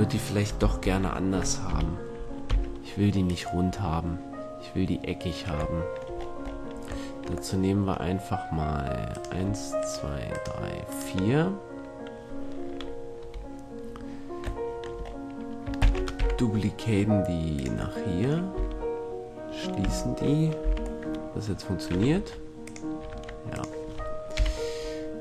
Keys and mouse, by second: 1.0 ctrl+l, 1.9 KP_1, 2.7 x, 7.9-12.9 middle drag, 13.3 KP_1, 14.8-17.2 middle drag, 15.9 shift+d, 18.1-19.5 drag, 18.7 f, 19.5 middle click, 20.0 f, 20.8 z, 22.3 ctrl+Tab, 23.3 ctrl+Tab, 24.5 KP_1.